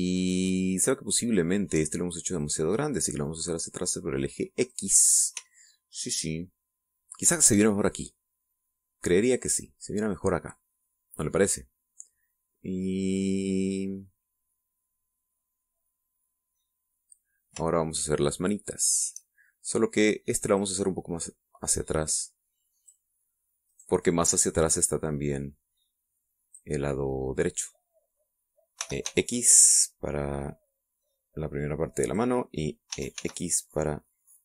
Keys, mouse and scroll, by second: 3.3 right click, 4.1-5.8 drag, 6.4-8.5 shift+middle drag, 18.7 shift+middle click, 18.9-20.2 shift+drag, 21.5 right click, 22.5-24.0 drag, 24.0 middle click, 24.6 click, 24.6 right click, 25.5-27.7 drag, 27.7-29.7 middle drag, 29.7 e, 30.0 x, 33.0 click, 33.9 e, 34.1 x.